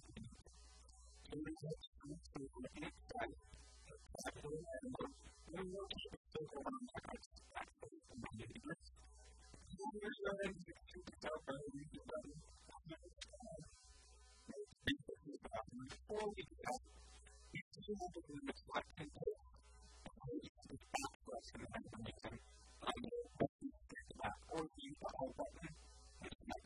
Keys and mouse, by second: 0.5 KP_1, 0.9 KP_3, 3.5 Tab, 5.3 r, 9.6 e, 13.5-15.1 drag, 13.6 a, 13.7 b, 15.5-17.4 middle drag, 15.9 a, 18.3-19.9 drag, 18.9-20.6 typing, 24.1 a, 24.6 right click, 25.3-26.6 typing.